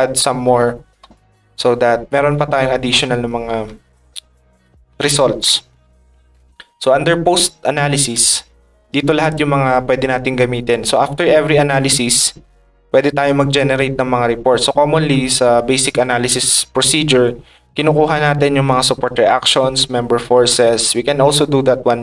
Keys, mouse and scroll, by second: 0.7 click, 7.4 ctrl+click, 9.2 click.